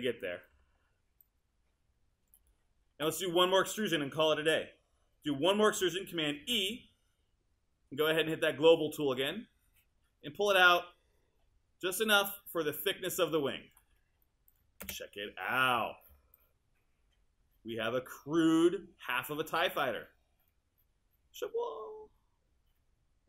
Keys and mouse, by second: 2.3 click, 2.6 click, 6.4 super+e, 14.9 space.